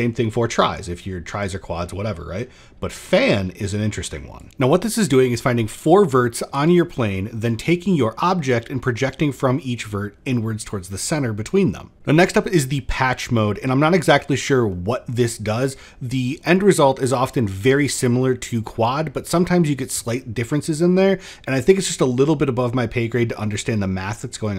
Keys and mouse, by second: 4.1 click, 13.3 click, 14.1 middle drag, 15.5-16.3 middle drag, 17.2-17.6 middle drag, 22.1 middle drag.